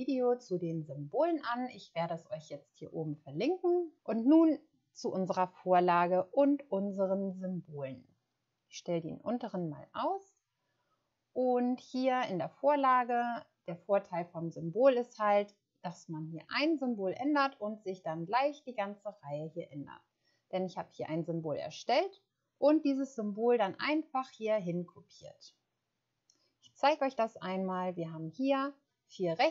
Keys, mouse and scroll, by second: 13.0 click, 26.0-26.5 scroll down 1.